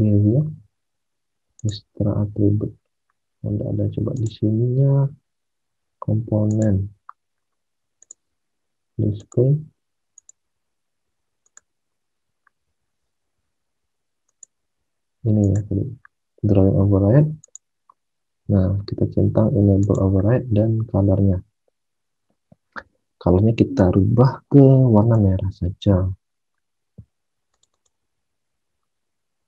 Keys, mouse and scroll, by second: 1.5 click, 24.9 click, 27.7 click.